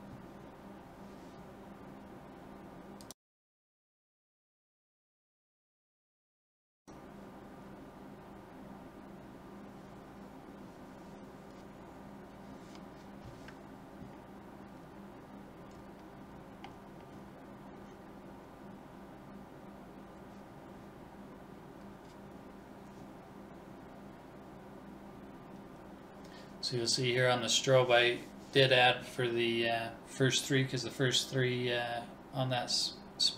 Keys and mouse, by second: 9.1-12.5 drag, 13.4 BackSpace, 19.4-21.3 drag, 23.0 Right.